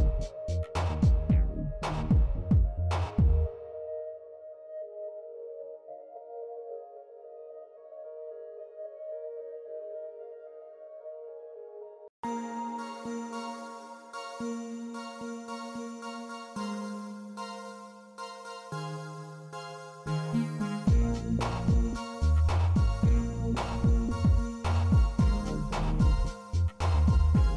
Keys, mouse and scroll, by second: 0.2-0.6 middle drag, 2.0 z, 3.7 click, 4.3 middle drag, 5.4 middle drag, 5.8 s, 8.0-8.5 middle drag, 9.0 shift+middle drag, 9.6 Tab, 10.4 click, 11.6 click, 12.9 click, 14.5-15.7 middle drag, 17.4 middle click, 20.7 click, 22.5 shift+middle click, 23.5 e, 25.3 e.